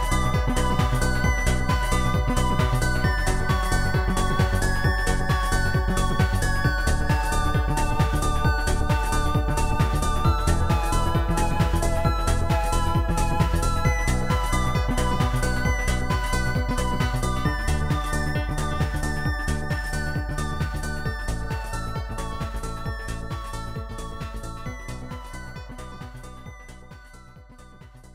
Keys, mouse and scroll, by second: 0.2 click, 0.9 ctrl+z, 1.0 click, 2.5 ctrl+z, 2.5 click, 3.7 ctrl+z, 3.7 click, 3.7 Delete, 5.1 click, 5.9 click, 6.8 click, 7.3 click, 9.0 click, 11.2 Return, 14.3 Return, 14.3 click, 17.1 Return, 17.1 click, 18.2 click, 19.2 click, 20.8 click, 23.2 click, 23.9 click, 24.7 click, 25.8 ctrl+z, 25.9 click.